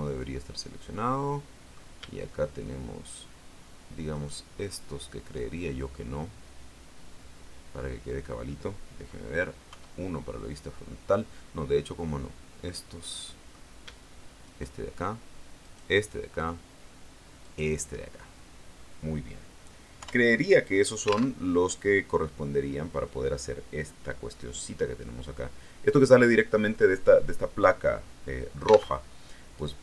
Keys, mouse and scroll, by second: 3.0 shift+right click, 4.0 shift+right click, 5.8-7.8 middle drag, 9.6 KP_1, 11.9 middle click, 13.0 middle click, 14.4 shift+right click, 15.5 shift+right click, 17.3 shift+right click, 19.9 KP_1, 21.3 alt+Tab, 28.9 alt+Tab.